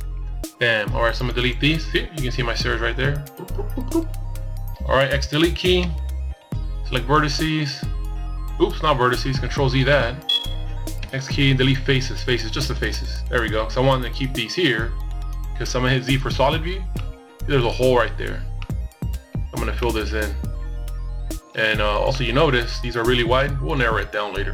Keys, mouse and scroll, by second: 3.4 x, 7.6 ctrl+z, 8.6 x, 13.9 z, 14.4 middle click, 16.0 middle click, 17.2 middle click, 19.5 middle click, 20.7 middle click, 22.9 KP_1.